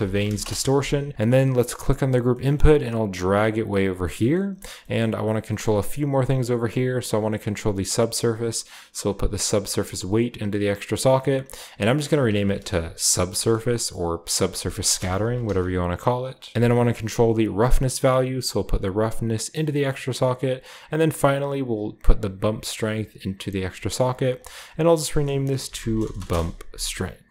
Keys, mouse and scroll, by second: 0.0-1.6 typing, 0.1 shift+click, 1.0-1.8 scroll down 1, 1.1-5.4 drag, 1.9-3.8 scroll down 1, 2.2 middle click, 2.7 typing, 4.4-6.7 scroll up 1, 6.7-7.9 scroll up 1, 6.8 typing, 7.9-8.8 scroll up 1, 9.0-10.2 drag, 11.0 click, 11.1 click, 11.9 click, 12.6 click, 13.2 BackSpace, 13.4 BackSpace, 13.7-14.8 drag, 14.8 space, 15.1 shift+s, 15.3 c, 16.5 Return, 16.5 typing, 18.3-19.9 drag, 22.6-23.7 drag, 24.3 click, 24.4 click, 24.9 click, 25.6-26.1 typing, 25.7 shift+click, 26.2 Return, 27.1-27.3 scroll down 1.